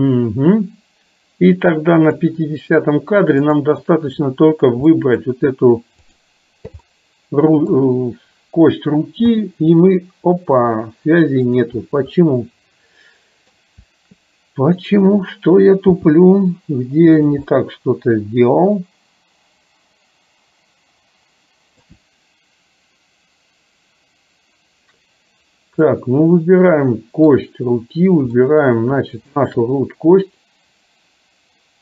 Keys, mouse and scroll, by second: 3.4 click, 5.0 middle click, 6.1 click, 7.0 middle click, 9.4 g, 12.3-13.5 middle drag, 16.1 g, 17.6-22.0 middle drag, 26.0-27.4 middle drag, 28.4 scroll up 1, 28.4 middle click, 29.4 shift+click.